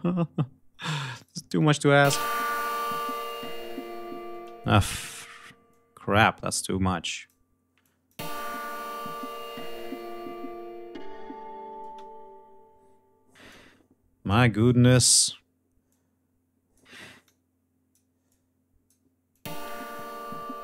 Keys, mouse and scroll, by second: 0.7 click, 1.5 click, 1.7 space, 3.9 space, 4.2 click, 5.3 click, 6.6 click, 7.4 click, 7.8 space, 11.4 space, 13.0 click, 14.2 click, 15.5 click, 16.8 click, 17.8 click, 18.9 click, 19.1 space.